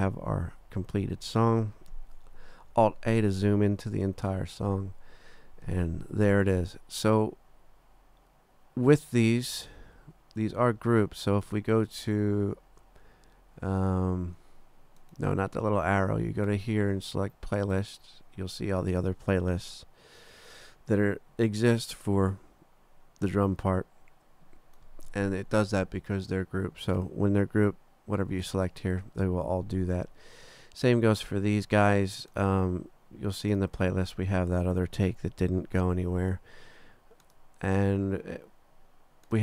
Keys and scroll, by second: 2.7 alt+a.